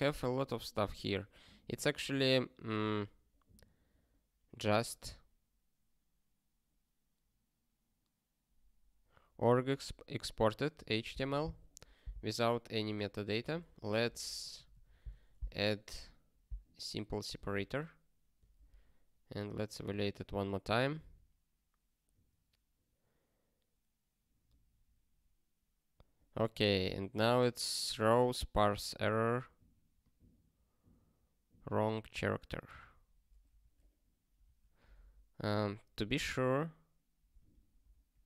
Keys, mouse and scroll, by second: 0.4 scroll up 1, 0.8 scroll down 1, 2.6 scroll up 1, 4.8 scroll down 1, 6.6 scroll up 1, 9.2 scroll up 6, 12.9 click, 13.4 ctrl+a, 14.0 ctrl+p, 14.4 -, 14.5 -, 15.1 ctrl+s, 17.3 super+b, 18.9 ctrl+k, 37.3 super+o, 37.8 super+b.